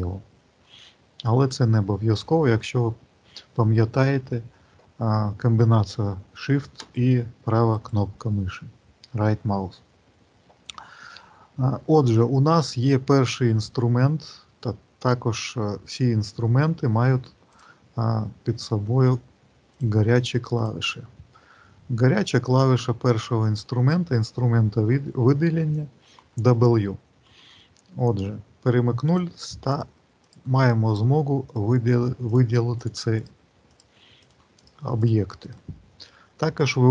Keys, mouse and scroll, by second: 3.7 click, 6.7 shift+right click, 7.6 shift+right click, 28.9 click, 29.5 click, 30.1 click, 30.7 click, 31.4 click, 32.1 click, 32.6 click, 33.0 click, 33.5 click, 34.1 click, 34.5 click, 34.9 click, 35.4 click.